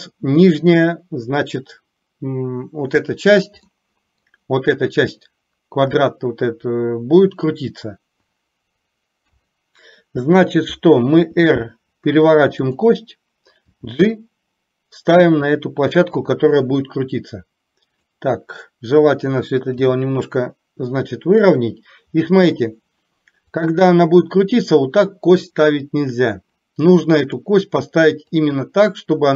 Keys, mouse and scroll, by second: 3.8 middle click, 9.3 KP_3, 11.3 r, 13.7 g, 18.1 click, 19.8 g, 27.4 click, 28.3-29.3 drag.